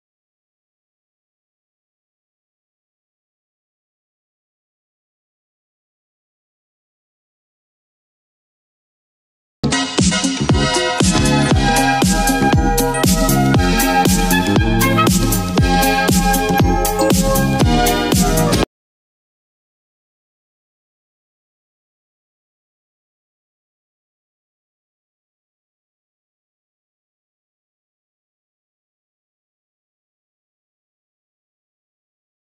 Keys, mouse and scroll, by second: 1.7-6.3 drag, 13.8 click, 13.8-14.3 drag, 21.3-22.0 drag.